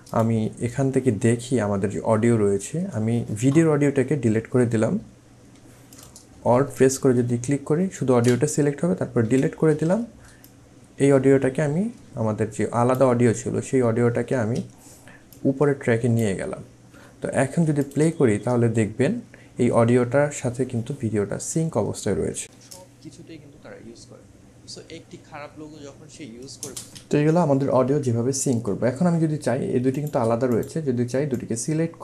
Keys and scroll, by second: 9.2 Delete, 14.3 ctrl+z, 22.5 space, 26.6 space.